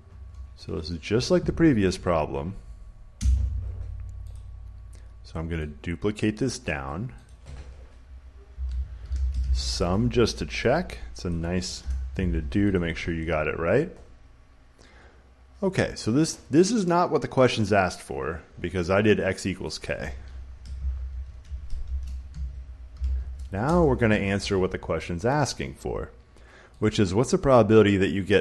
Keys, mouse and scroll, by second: 0.0-1.0 typing, 0.8 right click, 3.1 Return, 4.3 click, 6.6 click, 7.2 click, 8.2-9.9 typing, 11.2 click, 11.7 Return, 12.6 click, 18.9 click, 19.8 click, 20.5-23.6 typing, 21.3-22.7 shift+drag, 24.3 Return, 25.0 typing, 26.7 click.